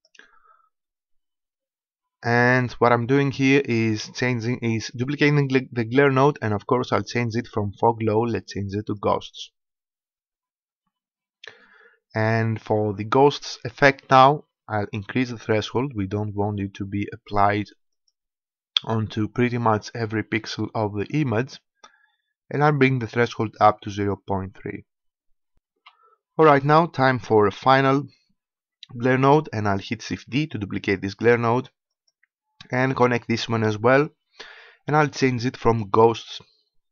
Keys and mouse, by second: 0.1-9.2 drag, 15.4-17.3 drag, 17.8-19.7 drag, 20.9-22.9 drag, 29.9 shift+d, 35.4-36.9 drag.